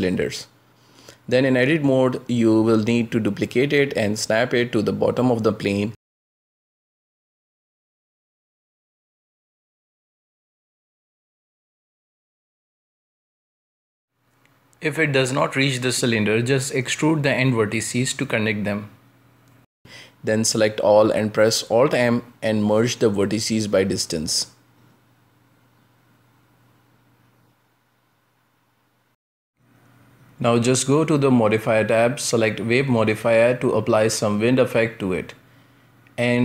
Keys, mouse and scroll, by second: 0.3 g, 1.4 g, 2.8 scroll down 1, 3.1 shift+middle click, 3.8 Tab, 3.8 scroll down 1, 4.3-5.9 shift+middle drag, 5.9 shift+d, 8.4 click, 9.0 g, 9.8 shift+middle click, 10.3 shift+d, 11.9 g, 12.8 g, 13.6 shift+middle click, 14.3 scroll up 2, 14.6 shift+middle click, 15.1-15.9 scroll up 1, 15.9 right click, 17.3 e, 19.5-19.9 scroll down 5, 19.9 shift+middle click, 20.5 a, 22.5 alt+m, 24.2-26.4 shift+middle drag, 26.4 scroll up 2, 26.9 Tab, 27.8 ctrl+space, 29.4-31.1 drag, 33.9 drag, 35.2 middle click, 35.6-36.3 scroll down 2, 36.3 w.